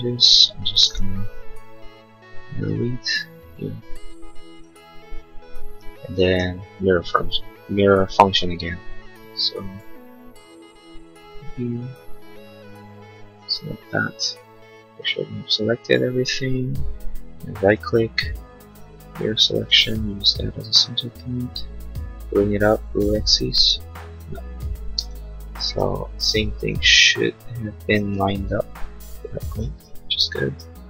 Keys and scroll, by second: 1.6 Delete, 4.9 Delete, 25.0 space.